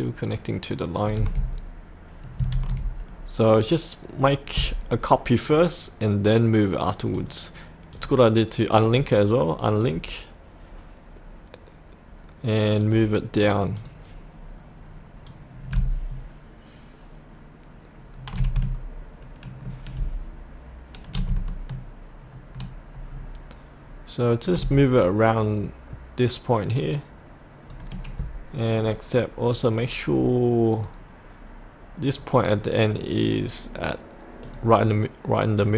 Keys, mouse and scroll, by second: 5.4 click, 8.0 click, 34.5-35.5 drag.